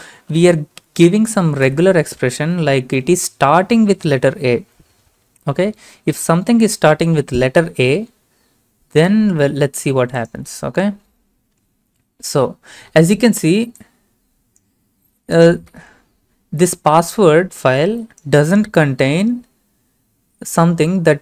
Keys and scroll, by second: 1.7 Up, 3.9 a, 6.3 ctrl+a, 6.8 ctrl+c, 15.7 ctrl+v.